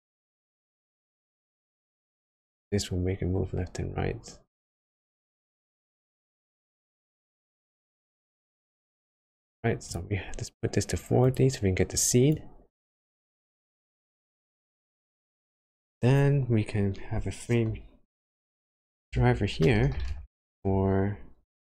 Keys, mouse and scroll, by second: 12.3 click.